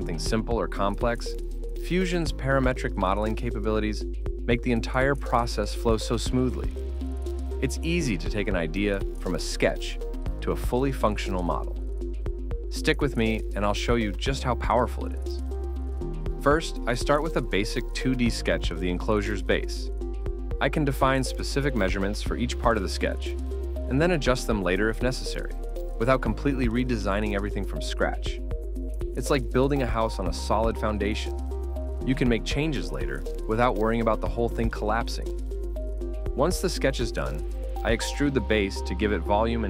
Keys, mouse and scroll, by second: 0.2 ctrl+middle click, 0.6-1.0 scroll down 1, 3.3 Return, 5.5 double click, 5.6-6.5 typing, 9.5 typing, 10.0 Return, 10.7 Escape, 10.9 Escape, 12.8 double click, 13.2 typing, 13.6 Return, 14.9 Escape, 15.0 Escape, 16.2 ctrl+click, 17.2 Escape, 18.5 Escape, 19.4 Escape, 21.6 ctrl+click, 22.7 ctrl+click, 23.5 ctrl+click, 30.7 scroll up 1, 33.3 scroll up 1, 33.5 ctrl+middle click, 37.0 scroll up 1, 37.2 ctrl+middle click.